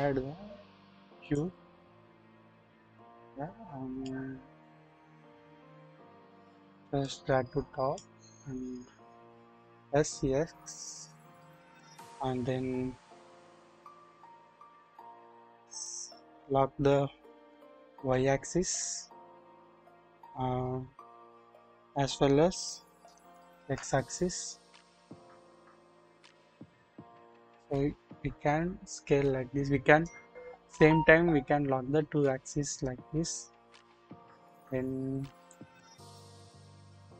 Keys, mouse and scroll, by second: 2.8 KP_1, 2.9 KP_1, 4.1-6.4 drag, 7.0 click, 8.8-9.5 scroll up 1, 9.5 s, 9.5 s, 23.0-23.8 typing, 34.9-35.4 scroll down 1, 35.5 click.